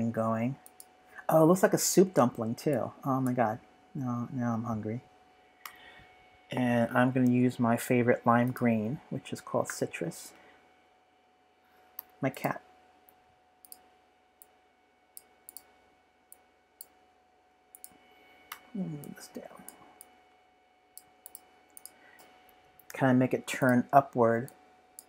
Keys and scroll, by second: 5.6 v, 10.7 shift+super+{, 11.9 v, 21.9-22.9 typing.